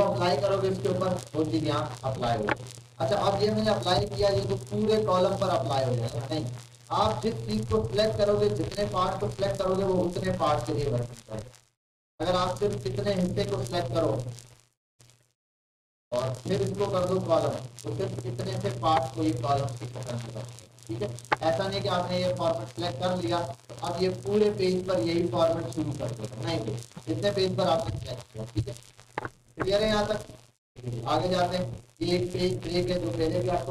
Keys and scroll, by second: 28.3 ctrl+z.